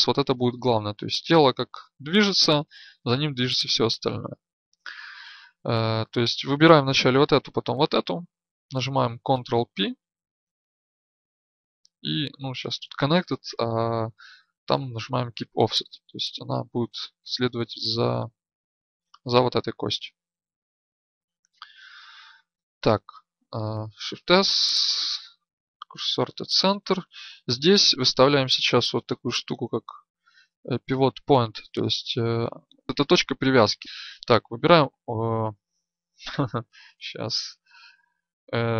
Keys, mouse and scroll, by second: 11.1 ctrl+p, 21.3-26.0 drag, 21.3 right click, 23.7 shift+s, 33.8 a, 36.8 shift+s.